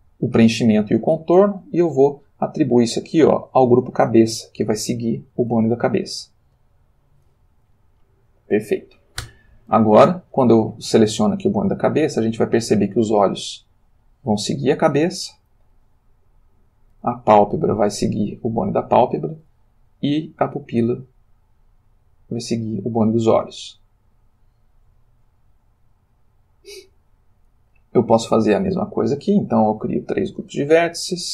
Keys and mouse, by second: 2.4 click, 6.6 click, 7.8-8.9 ctrl+middle drag, 9.3 Tab, 10.3 click, 11.3 r, 14.8 Escape, 15.9 click, 17.0 g, 19.1 Escape, 19.9 click, 20.9 g, 26.0 Escape, 27.9 click, 30.1-31.0 drag.